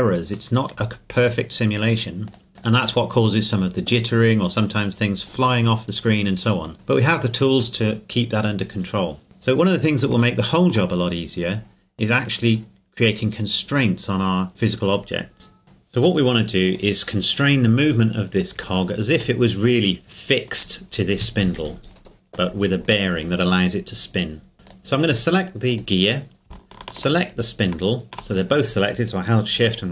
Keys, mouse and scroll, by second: 2.3 click, 5.9 middle click, 9.2-9.6 scroll up 1, 9.6-10.8 scroll down 2, 10.8-12.2 shift+scroll up 1, 12.2 right click, 15.6 right click, 16.1 right click, 16.7 right click, 17.8 scroll down 1, 18.8 shift+middle click, 21.3 scroll up 1, 22.5 middle click, 24.6 right click, 27.0 shift+right click.